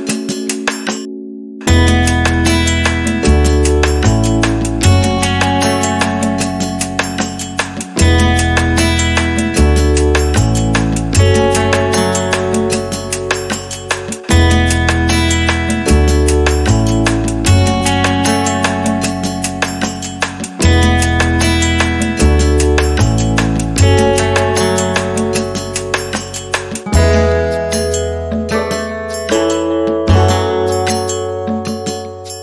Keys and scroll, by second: 1.4 r, 15.0 space, 16.3 e.